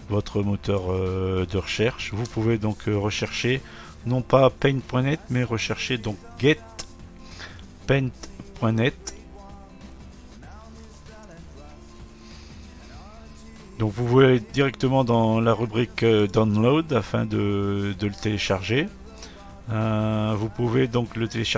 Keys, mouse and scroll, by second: 0.7-3.8 drag, 4.4-6.2 typing, 10.4-10.8 typing, 11.2 Return, 14.2 typing, 16.3 click, 19.2-19.6 scroll down 3.